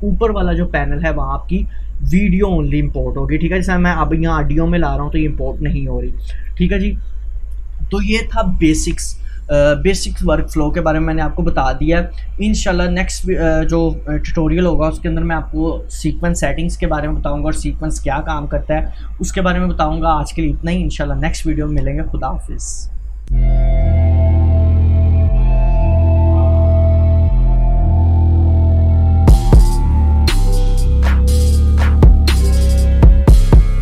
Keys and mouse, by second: 6.7 Delete.